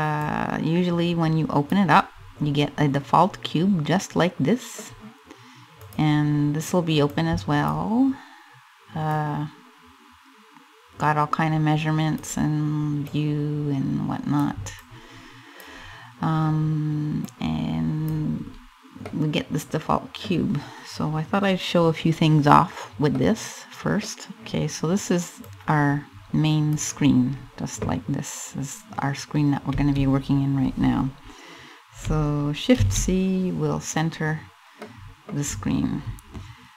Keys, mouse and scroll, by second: 1.8 scroll up 3, 2.5 middle click, 3.6 middle click, 3.8 middle click, 4.4-5.0 scroll down 1, 5.5 click, 6.8 click, 8.7 click, 12.7 click, 14.4 click, 16.8 click, 18.1 scroll up 3, 18.6 middle click, 22.7 middle click, 25.0 click, 32.4 shift+c, 33.4-33.9 scroll down 2, 34.4 middle click.